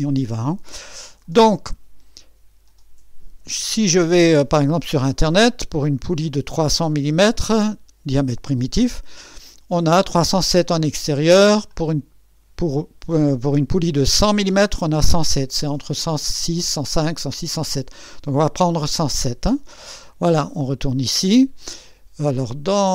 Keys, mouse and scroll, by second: 4.5 click, 11.7 click, 20.6 click.